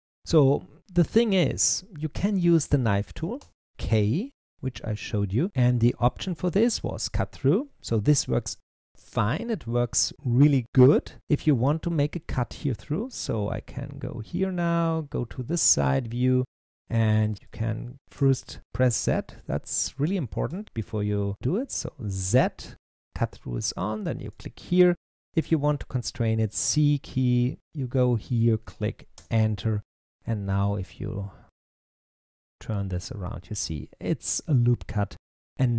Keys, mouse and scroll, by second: 3.3 k, 5.0-7.6 middle drag, 8.8-10.8 middle drag, 13.0-16.0 middle drag, 20.4 k, 30.0-33.0 middle drag.